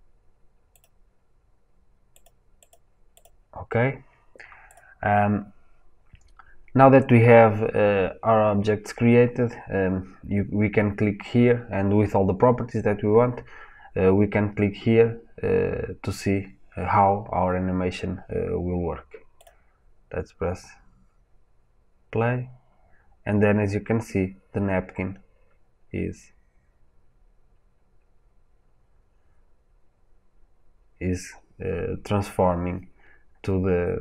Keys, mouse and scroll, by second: 19.3-25.6 drag.